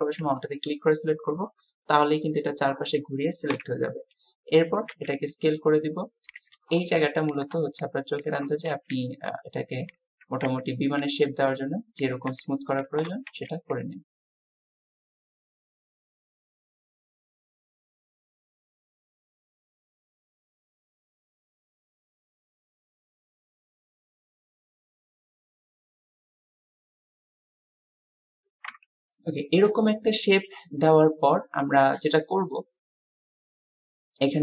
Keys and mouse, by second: 1.6 middle click, 3.6 KP_3, 5.0 s, 15.5 s, 15.7 click, 15.8 alt+shift+click, 16.2 s, 16.5 alt+shift+click, 16.9 s, 17.3 alt+shift+click, 18.2 s, 20.3 click, 24.8 click, 25.5 s, 25.8 s, 27.1-27.9 typing, 28.1 Tab, 28.7 Tab, 30.3-34.4 drag, 31.8 typing.